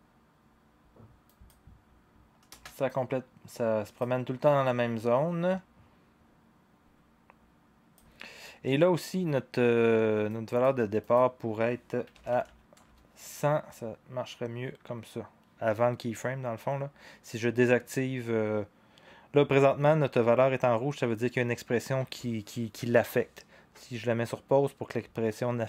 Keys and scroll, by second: 11.8-12.7 typing, 12.8-15.4 Return.